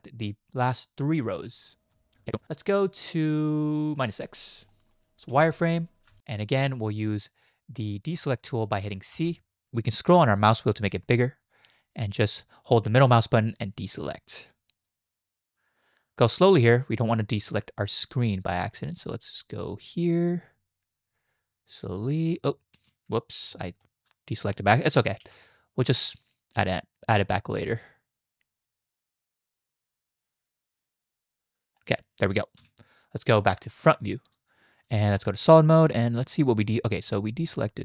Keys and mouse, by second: 1.9 alt+shift+drag, 4.7 shift+middle click, 5.3 z, 9.1 c, 23.5 shift+middle drag, 24.7 shift+drag, 25.2 c, 33.8 click, 35.1 z, 36.6 shift+click, 37.2 click.